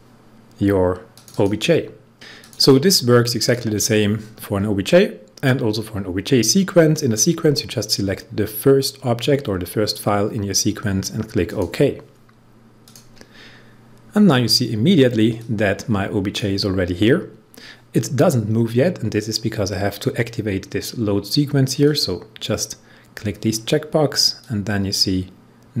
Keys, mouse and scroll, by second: 1.2 click, 2.3 click, 3.4 click, 11.4 click, 15.4-19.0 drag, 21.7 click, 24.4-25.8 drag.